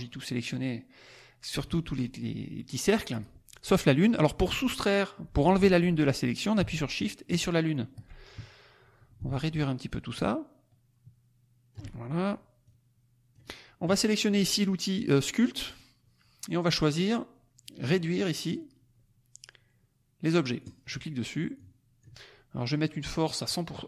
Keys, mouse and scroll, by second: 7.2 shift+click, 9.1-11.9 ctrl+drag, 12.6 click, 15.6 click, 20.6 click, 21.5 click, 23.1 click.